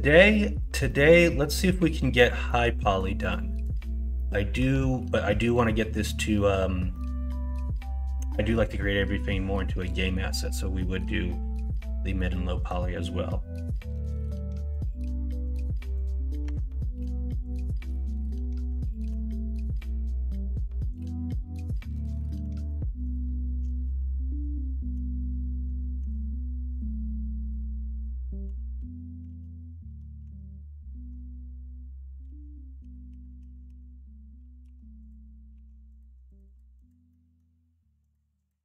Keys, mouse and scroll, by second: 0.8 middle click, 2.4 middle click, 3.3 middle click, 4.1 middle click, 7.0 middle click, 9.9 middle click, 10.1-10.7 scroll down 1, 10.7 middle click, 10.9-12.1 scroll down 2, 11.5 middle click, 12.1 middle click, 12.6-14.7 scroll down 1, 14.7-16.4 scroll down 1, 16.4 Tab, 18.9 ctrl+l, 21.3-21.9 middle drag, 22.3 ctrl+z, 23.0 shift+click, 23.8 ctrl+z, 25.9 ctrl+l, 27.8 middle drag, 28.4 KP_1, 28.7 KP_3, 29.2 alt+z, 30.2 Tab, 32.2-35.5 typing, 36.7 click, 37.0 middle click.